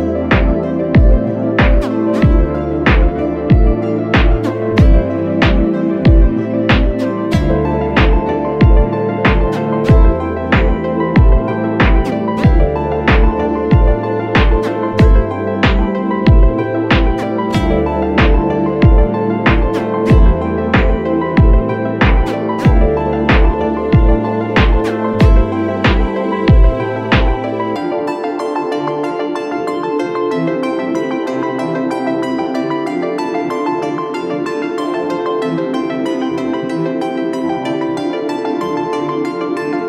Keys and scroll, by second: 0.2 super+=, 0.5 super+=, 0.9 super+=, 10.4 super+z, 12.3 super+z, 23.5 space, 23.9 space, 24.0 space, 24.8 super+-, 25.0 super+-, 25.4 super+-, 26.3 space, 26.7 space, 26.8-27.3 space, 32.1 super+=, 32.3 super+=, 32.4 super+=, 38.3 super+z.